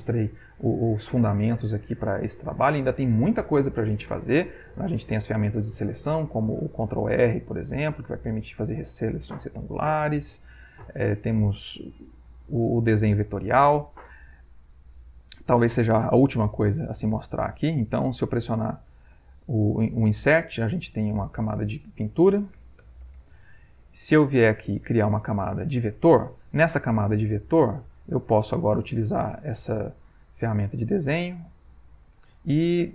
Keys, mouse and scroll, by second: 5.1 click, 6.6 ctrl+r, 7.1 ctrl+click, 14.8 click, 17.0 ctrl+shift+a, 19.1 Insert, 20.8 click, 22.2-23.5 typing, 24.6 click, 25.8 click, 27.8 click, 31.8 click.